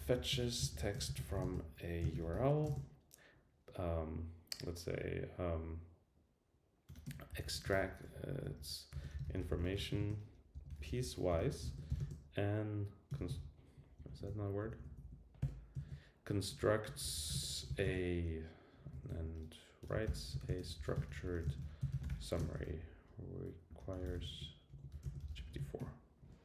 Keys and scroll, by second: 14.0 alt+Left, 14.5 alt+Left, 15.8 super+Right, 19.0 alt+shift+Left.